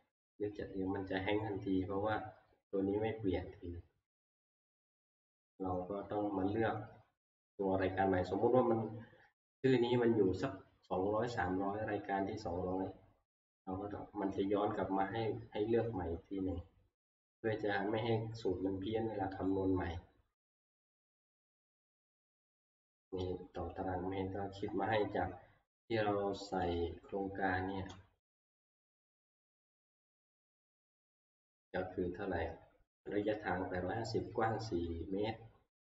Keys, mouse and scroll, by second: 4.5 click, 5.5 click, 16.7 click, 19.5 click, 20.2 scroll down 1, 23.8 click, 26.9 click, 30.0 click, 30.2 Right, 30.4 Right, 30.6 Right, 30.8 Right, 31.3 Right, 33.3 click, 34.3-35.2 Right.